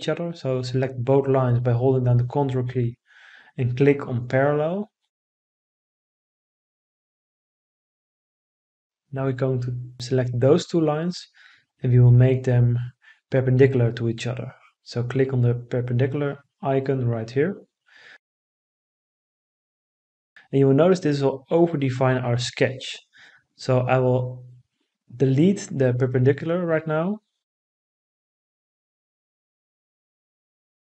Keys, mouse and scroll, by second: 26.6 Delete.